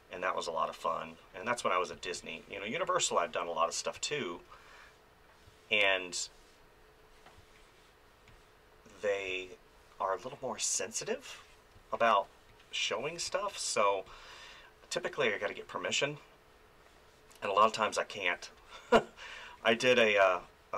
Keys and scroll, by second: 1.9 space, 3.9 space, 7.4 space, 9.3 space, 11.7 space, 20.2 space.